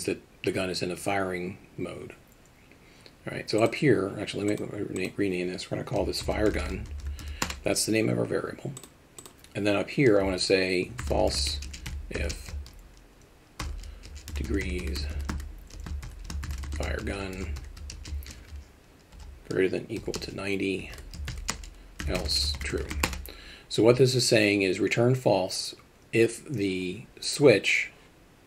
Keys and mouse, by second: 3.6 click, 5.0-8.4 drag, 8.8 click, 9.2-24.4 drag.